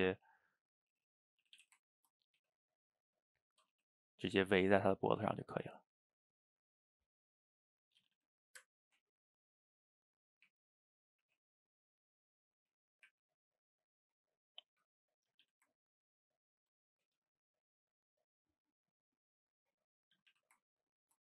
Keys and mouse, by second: 0.1 g, 0.9 click, 1.5 a, 1.6 a, 1.8 ctrl+right click, 2.4 g, 3.7 a, 4.1 click, 4.3 g, 4.9 click, 5.1 g, 6.3 click, 6.5-7.8 middle drag, 7.8 click, 8.0 a, 8.2 a, 8.3 middle click, 9.1 ctrl+right click, 10.5 r, 11.3 g, 13.1 r, 14.8 g, 15.3 a, 15.4 a, 15.7 ctrl+right click, 17.2 g, 20.2 a, 20.3 a, 20.6 ctrl+right click.